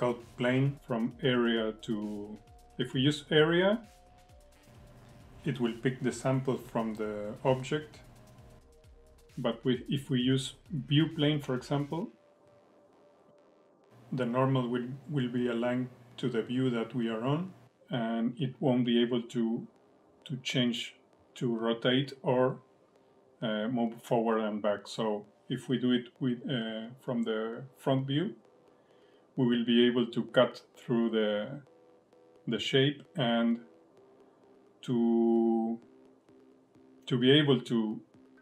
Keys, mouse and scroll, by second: 2.9 click, 7.2 alt+middle click, 9.4 click, 11.4 alt+middle click, 12.2 click, 14.1 alt+middle click, 15.0 click, 17.3 alt+middle click, 18.1 click, 20.0 alt+middle click, 20.5 alt+middle click, 21.3 click, 23.5 scroll down 1, 23.8 middle click, 25.1-25.5 scroll up 5, 25.5 middle click, 28.2 scroll up 1, 28.6 shift+middle click, 29.4 middle click, 30.2 shift+middle click, 33.3 middle click, 34.1 middle click, 37.1 click.